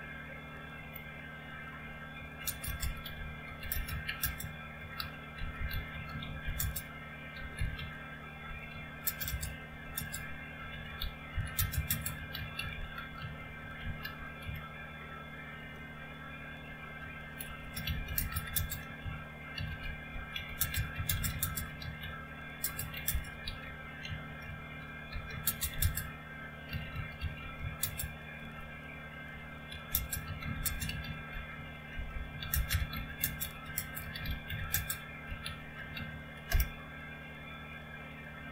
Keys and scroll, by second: 0.7 typing, 2.1-36.9 typing.